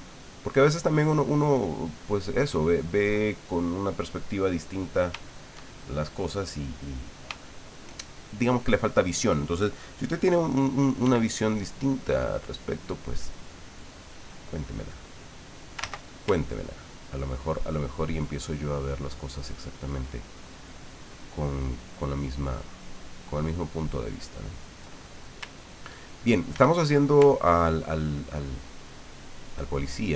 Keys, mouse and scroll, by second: 2.1 ctrl+click, 3.7-5.1 drag, 5.2 shift+click, 6.1 middle click, 6.5 click, 7.4 shift+click, 11.0 f, 12.5 click, 13.9-15.8 drag, 15.8 ctrl+z, 16.8-19.8 ctrl+drag, 20.8-23.8 ctrl+drag, 24.0 ctrl+click, 25.7 ctrl+click, 26.5 ctrl+z, 27.4-29.6 ctrl+drag, 30.0-30.1 ctrl+drag.